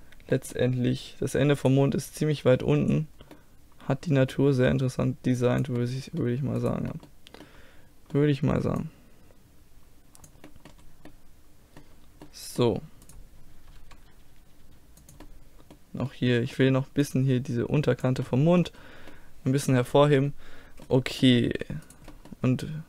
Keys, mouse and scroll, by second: 1.6-3.5 right drag, 2.1-3.8 drag, 3.4-5.8 middle drag, 5.4-6.6 drag, 6.6 right click, 7.3-8.6 middle drag, 8.8 middle click, 9.6 click, 10.5 middle click, 11.2-13.1 middle drag, 13.1 right click, 13.9 g, 14.3-15.3 drag, 17.1 middle click, 18.1 click, 18.3 middle click, 20.9-21.9 middle drag, 21.9-22.8 right drag.